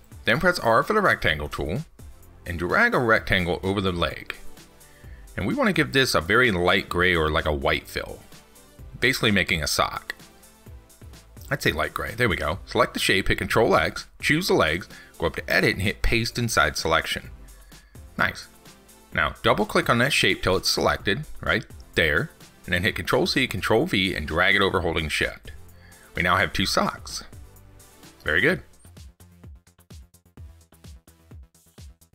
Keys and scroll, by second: 14.0 ctrl+x, 23.2 ctrl+c, 23.5 ctrl+v, 30.1 ctrl+s.